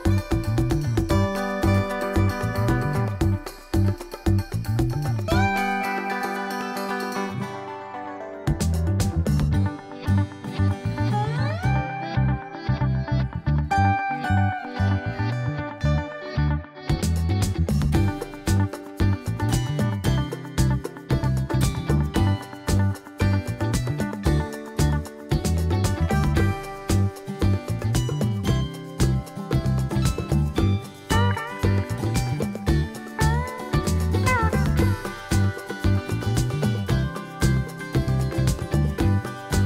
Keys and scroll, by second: 1.4 super+d, 1.7 super+d, 2.1 super+d, 4.5 BackSpace, 6.8 BackSpace, 7.3 BackSpace, 7.7 BackSpace, 8.2 BackSpace, 10.4 BackSpace, 28.8 BackSpace, 30.6 BackSpace.